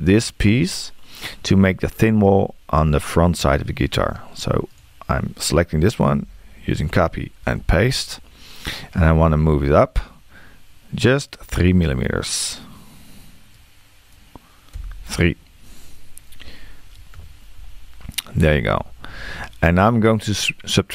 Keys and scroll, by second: 14.8 3.